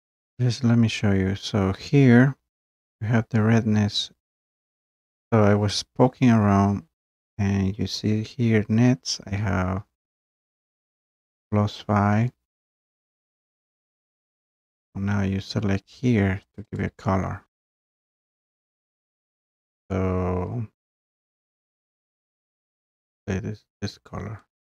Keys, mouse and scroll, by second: 0.3-0.9 scroll, 2.3 scroll, 4.1-4.4 scroll, 5.7 scroll down 1, 5.8 click, 8.9 scroll, 16.6 click, 16.8 click, 22.7 click, 24.6 click.